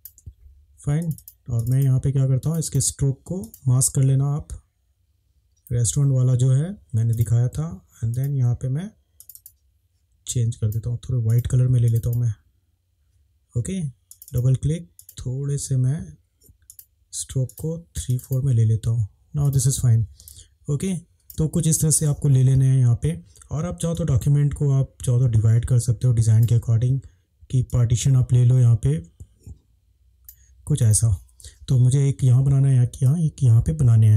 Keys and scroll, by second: 20.3 space.